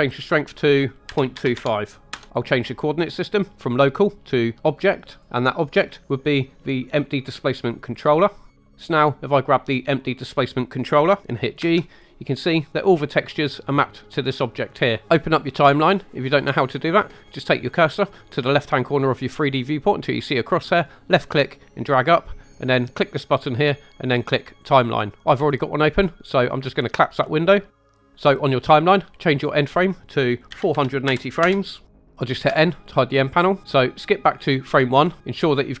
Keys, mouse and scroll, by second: 0.6-2.1 drag, 3.5-5.2 drag, 6.0-7.9 drag, 9.7 click, 11.6 g, 20.7 click, 23.0-24.6 drag, 27.4 click, 29.6-31.5 drag, 31.9 Home, 34.6 click.